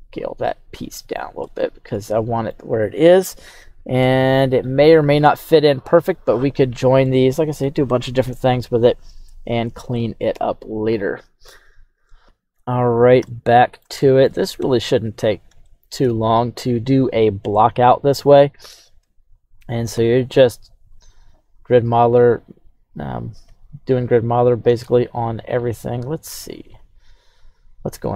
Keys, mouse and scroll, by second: 0.1 click, 0.4-1.1 middle drag, 1.5-2.5 middle drag, 2.5-4.0 scroll up 5, 4.0-4.9 middle drag, 4.0-4.5 scroll up 2, 6.0-6.6 scroll down 2, 6.6 scroll down 2, 7.0-7.6 middle drag, 8.1-8.9 scroll down 2, 10.3 click, 12.2 middle click, 12.2 scroll down 2, 13.2-13.9 middle drag, 14.0 shift+middle click, 14.5 KP_3, 15.1-15.6 scroll up 2, 15.6 shift+middle drag, 18.4 right click, 18.9 Tab, 19.2 right click, 19.9 q, 23.5-24.6 alt+scroll up 3, 24.6 ctrl+Tab, 26.3 ctrl+Tab, 27.9 right click.